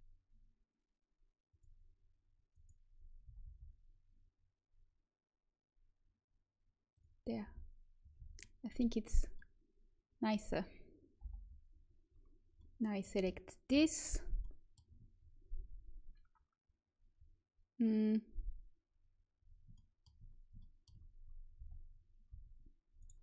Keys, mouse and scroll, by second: 2.4 right click, 3.2 g, 7.2 middle click, 7.4 z, 8.1 a, 11.1 l, 13.6 KP_1, 19.7-21.2 middle drag, 21.5 z, 22.2 s.